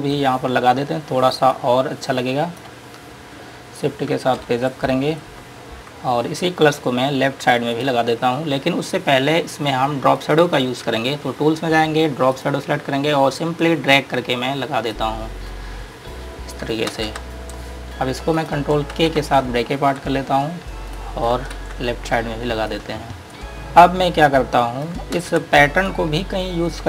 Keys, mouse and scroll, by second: 0.6-1.9 scroll down 1, 1.9 click, 3.3-4.4 scroll up 1, 4.7 shift+Page_Up, 6.4-8.1 scroll down 1, 8.1 click, 8.8-10.5 scroll up 1, 10.5 click, 17.2 ctrl+space, 17.7 scroll down 1, 18.6 click, 20.9 click, 22.2-22.5 scroll down 1, 23.0 click, 23.5 click, 25.5 space, 26.2 click.